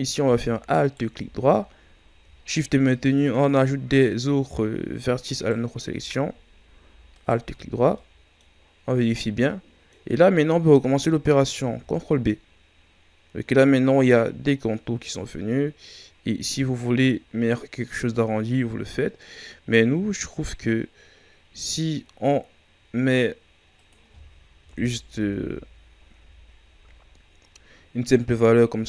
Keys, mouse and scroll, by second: 0.7 alt+right click, 1.6-4.6 scroll up 1, 5.3-7.6 alt+shift+right drag, 7.6 scroll down 2, 7.9 middle click, 8.9 scroll down 1, 9.4-11.5 middle drag, 11.5 ctrl+b, 24.6 KP_1, 25.2 Tab, 25.8 scroll down 1, 26.1 a, 26.8-27.2 scroll up 5.